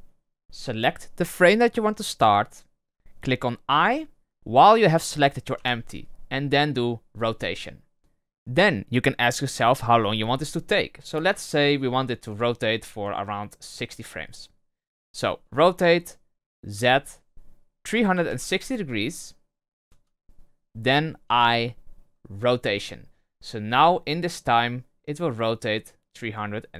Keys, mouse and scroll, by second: 5.5 i, 8.0 space, 8.0-10.3 drag, 10.3 space, 11.2 space, 12.3-15.4 drag, 15.4 r, 21.2 i, 23.5-26.6 drag.